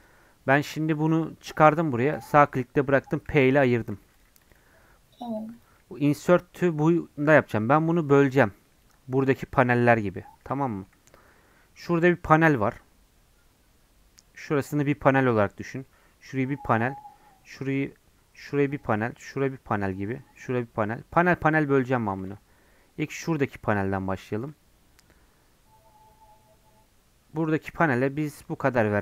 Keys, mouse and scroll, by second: 4.1 click, 4.6 g, 5.6 click, 5.8 g, 10.2-21.6 middle drag, 21.6 Tab, 22.2 ctrl+r.